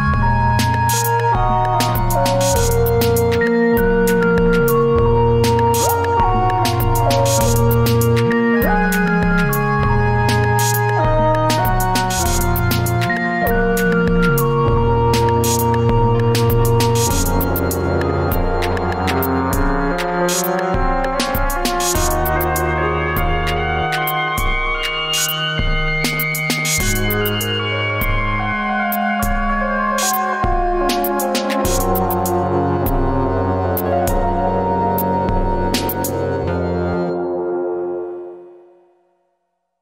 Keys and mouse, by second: 18.3-19.7 middle drag, 20.9 middle click, 23.0 ctrl+r, 25.2 Tab, 26.3 ctrl+r, 30.2 Tab, 30.9-31.5 middle drag, 31.7 alt+z, 32.2 alt+z, 32.7 Tab, 34.1 ctrl+s, 35.0 F4, 37.2 Tab, 38.4 F4, 39.5 F4.